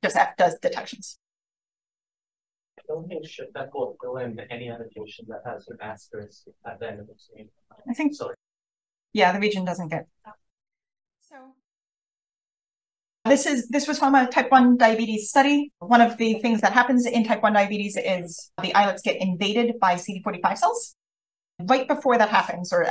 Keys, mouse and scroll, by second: 2.3 f, 4.3 click, 7.3-8.3 scroll up 2, 8.3-9.2 shift+scroll up 1, 8.5 shift+f, 9.2-10.1 scroll up 1, 10.5-16.9 scroll up 4, 11.3 click, 12.1 click, 16.9-21.6 scroll up 1, 21.6-22.9 scroll up 1.